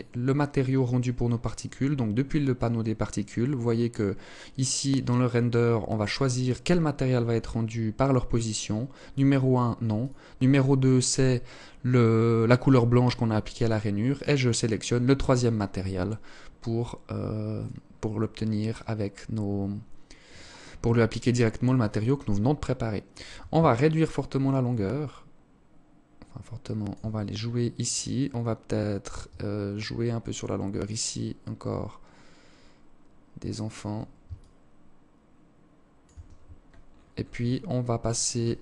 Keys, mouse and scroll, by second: 9.0 click, 13.2 click, 16.6-18.5 scroll up 4, 18.5 scroll up 1, 22.7 shift+click, 26.3-27.1 scroll down 9, 27.1 scroll up 1, 28.8 shift+click, 33.4 shift+click, 35.9-36.6 scroll up 11, 37.0 click, 38.0 click.